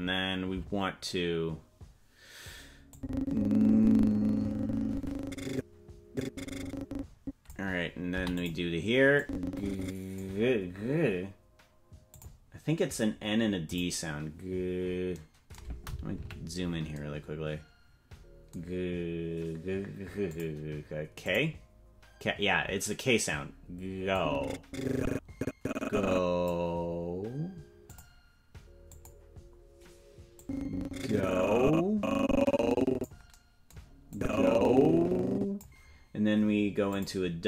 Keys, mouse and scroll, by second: 2.9-7.5 drag, 9.2-10.2 drag, 12.1 click, 13.6 click, 16.1 KP_Decimal, 20.3 click, 21.2 click, 24.1-26.5 drag, 27.9 click, 28.9 click, 30.4-33.0 drag, 34.1-35.6 drag, 36.9 click.